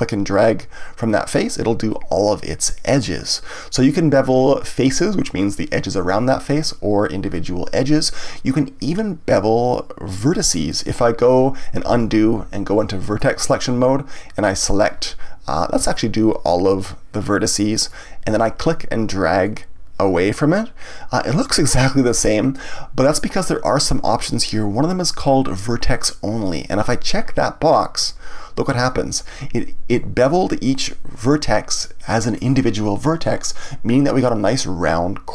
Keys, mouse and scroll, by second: 0.3 click, 11.8 ctrl+z, 13.1 click, 14.4 click, 15.9 shift+click, 16.8 shift+click, 17.7 shift+click, 19.4 click, 28.0 click, 31.8-35.3 middle drag.